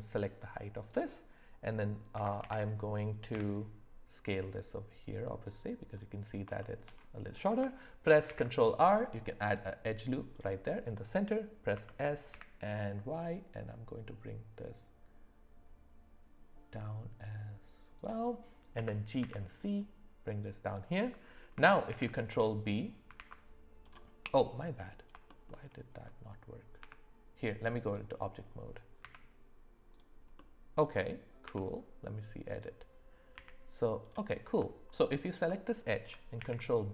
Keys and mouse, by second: 2.1 s, 6.6 shift+middle click, 8.2 ctrl+r, 11.7 s, 18.7 g, 21.9 ctrl+b, 24.3 middle click, 25.2 shift+middle click, 26.8 Tab, 29.0 z, 29.9 click, 30.3 middle click, 31.4 Tab, 32.5 click, 33.3 g, 34.9 alt+click, 36.4 ctrl+b.